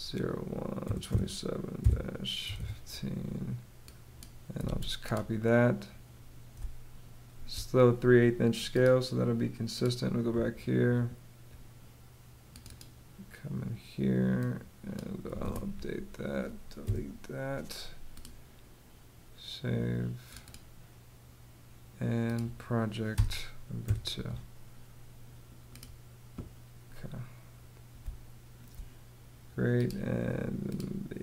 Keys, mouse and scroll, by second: 0.0-2.5 typing, 4.1 super+c, 6.0 space, 14.9 super+v, 16.3 Delete, 22.6 BackSpace, 23.3 2, 27.5 space.